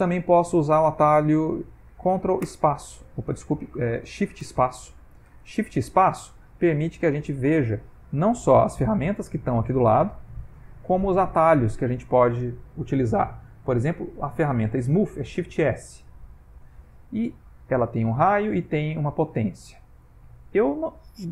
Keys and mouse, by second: 2.5 ctrl+space, 3.4 ctrl+space, 4.5 shift+space, 5.3 shift+space, 10.4 shift+space, 17.8 click, 18.8 click.